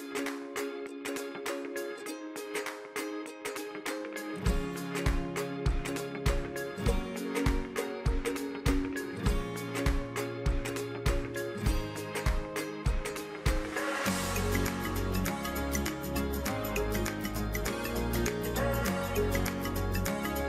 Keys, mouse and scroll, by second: 3.1 click, 4.3 e, 7.3-9.4 drag, 10.9-18.5 middle drag, 18.5 KP_1.